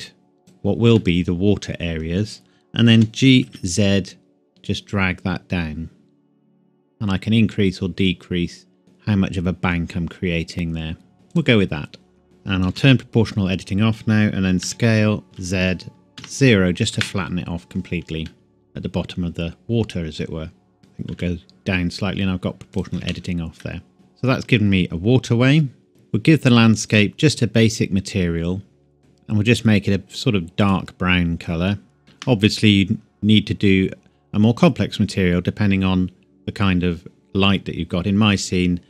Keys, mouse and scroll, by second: 0.3 scroll down 1, 0.4 click, 1.0 middle click, 3.0 g, 3.5 z, 5.6-6.3 scroll down 1, 6.3-7.4 scroll up 1, 7.4-9.3 scroll down 1, 11.3 click, 12.7 o, 14.6 s, 15.3 z, 16.2 KP_0, 17.0 KP_Enter, 18.3 middle click, 20.8 g, 21.1 z, 22.8 click, 23.0 Tab, 23.6 middle click, 25.9 click, 32.0 ctrl+c, 32.6-33.4 scroll down 1.